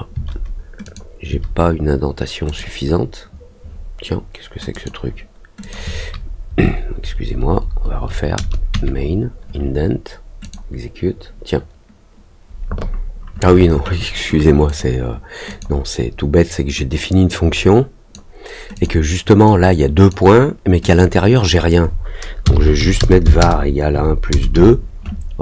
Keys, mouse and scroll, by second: 0.8 click, 2.4 click, 4.7 click, 5.6 click, 10.4 click, 14.6 click, 15.4 click, 17.2 click, 18.7 click, 19.4 click, 20.8 click.